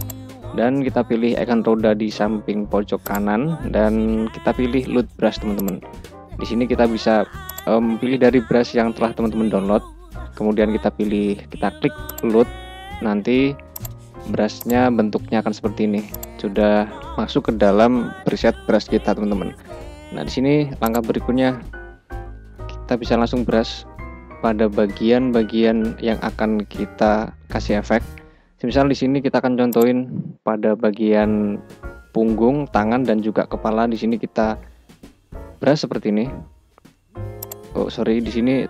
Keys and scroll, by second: 23.0 [, 34.1 [.